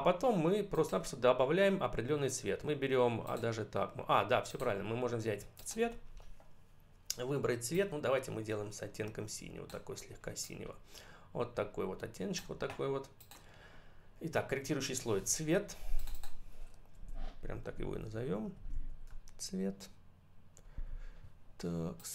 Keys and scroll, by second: 17.8 Up, 18.0 w, 18.9 BackSpace.